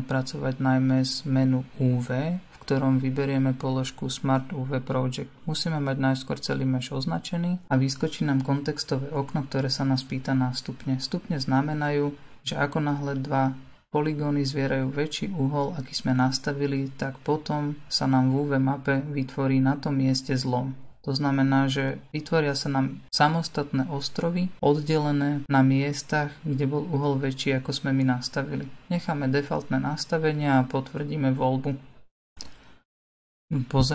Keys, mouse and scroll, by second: 33.5-33.9 middle drag.